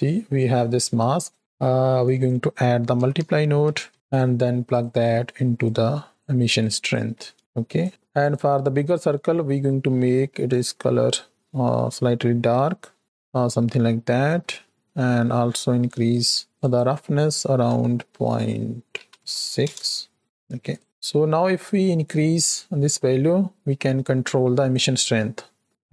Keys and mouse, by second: 2.1-4.1 drag, 4.5 click, 5.5 click, 6.5 click, 8.1 click, 14.4 shift+middle click, 16.1 click, 16.6-19.5 drag, 20.3 middle click, 21.5-24.9 drag.